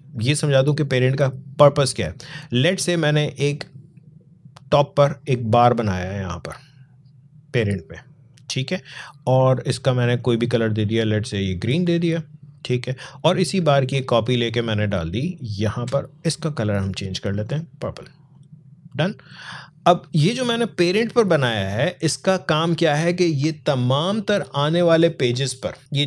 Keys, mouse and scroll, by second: 0.1-9.3 drag, 13.7-16.4 alt+drag, 25.8 click.